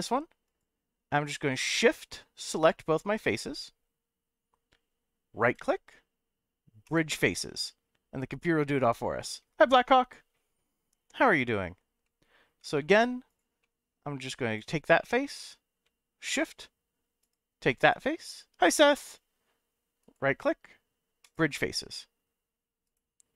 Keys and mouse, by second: 0.4 click, 1.5 middle click, 2.8 shift+click, 5.5 right click, 12.0 middle click, 12.8 ctrl+z, 13.6 middle click, 15.1 middle click, 17.2 shift+click, 20.0-21.3 right drag, 22.8 right click.